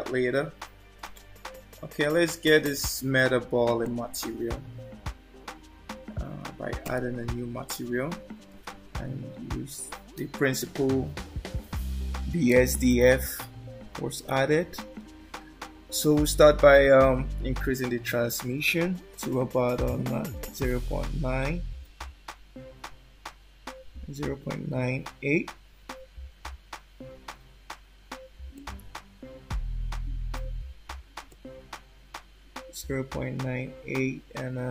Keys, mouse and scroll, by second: 3.8 click, 8.0-9.8 scroll down 8, 16.4 click, 25.0-25.7 scroll up 2, 25.7-27.3 scroll up 4, 31.3 shift+click.